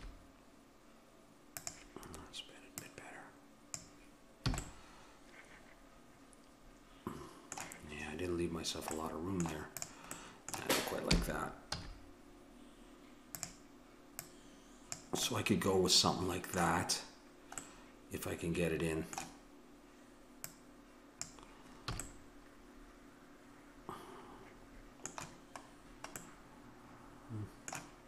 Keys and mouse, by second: 2.8-4.9 drag, 4.5 a, 4.9-6.2 middle drag, 9.0 middle click, 9.8-11.7 drag, 11.1 r, 11.7-12.8 middle drag, 14.2-15.3 drag, 15.3-20.5 middle drag, 20.5-22.1 drag, 22.0 a, 22.1-23.9 middle drag, 25.7-28.0 middle drag.